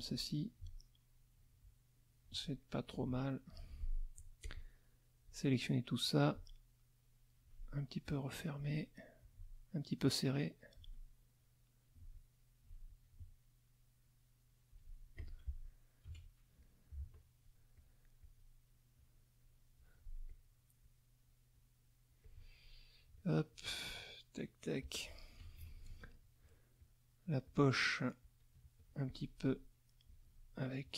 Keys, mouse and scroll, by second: 0.3-2.4 alt+drag, 2.9 alt+click, 4.1-5.4 drag, 6.0-7.6 drag, 8.0 click, 9.2-10.9 alt+drag, 12.1 alt+click, 15.1 alt+click, 16.0 ctrl+KP_5, 16.6 ctrl+middle click, 17.7 click, 18.2 click, 18.9-19.9 drag, 20.3 click, 20.8 click, 21.5 click, 23.3 shift+click, 24.4 shift+click, 25.4 ctrl+shift+KP_5, 26.7 shift+click, 27.4 shift+click, 28.2 shift+click, 29.0 shift+click, 30.8 middle click.